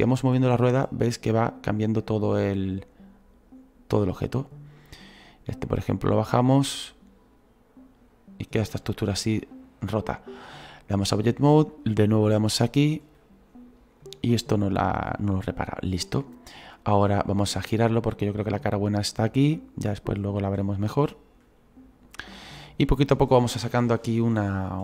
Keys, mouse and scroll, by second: 4.7 middle click, 5.7 right click, 6.4-9.0 drag, 9.0-11.1 middle drag, 11.1-15.2 drag, 15.2-17.7 middle drag, 17.7-20.5 drag, 20.5-24.3 middle drag, 24.3-24.8 drag.